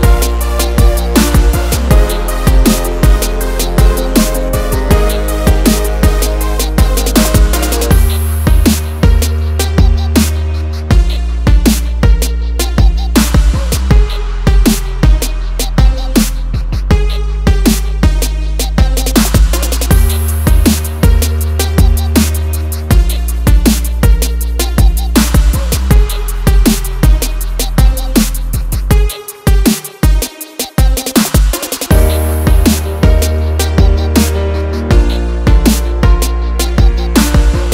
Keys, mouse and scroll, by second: 0.4 0, 3.3 click, 5.5 d, 7.8 click, 9.3 s, 11.5 click, 12.7 c, 13.0 h, 13.1 d, 15.2 click, 18.9 click, 21.1 click, 22.1 click, 23.5 click, 24.3 ctrl+click, 25.7 ctrl+r, 27.6 ctrl+click, 28.5 ctrl+click, 29.6 click, 30.3 scroll down 1, 30.7 scroll up 1, 32.7 ctrl+r, 32.7 scroll down 1, 33.4 click, 34.3 ctrl+z, 35.3 ctrl+click, 37.3 click.